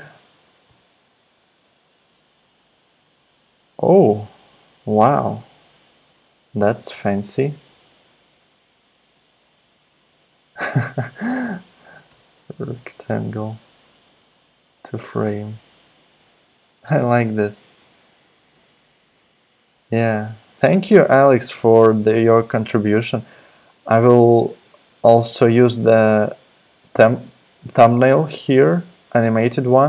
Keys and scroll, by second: 0.6 z, 6.9 r, 12.1 r, 16.7 alt+super+Left, 22.3 alt+super+Left.